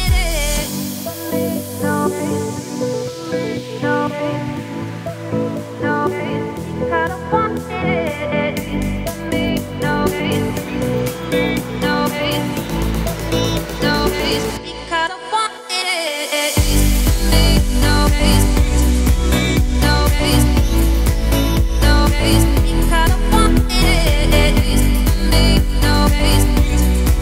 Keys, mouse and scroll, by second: 0.1 Tab, 0.4 click, 0.8 middle click, 1.4 click, 1.7 scroll down 1, 1.9-3.0 middle drag, 3.0 click, 3.2 3, 3.3 click, 3.9 shift+click, 4.3-5.7 middle drag, 5.7 shift+click, 6.0-6.4 scroll up 4, 6.7 shift+click, 7.3 shift+middle click, 8.1 shift+click, 8.4 middle click, 9.2 ctrl+click, 9.7-10.8 scroll down 2, 10.8 shift+click, 11.0 scroll down 1, 11.2 middle click, 11.6 s, 16.0-17.5 middle drag, 17.5-18.0 scroll down 4, 18.0 middle click, 18.9 Tab, 21.5 middle click, 21.6 scroll up 1, 21.9 click, 22.0 Tab, 22.3 `, 22.7-23.1 scroll up 2, 23.1 Tab, 23.4 Tab, 23.9 Tab, 24.5 shift+right click, 24.9 shift+a, 26.4 Tab, 26.6 scroll up 2, 26.8 scroll down 2, 26.9 middle click.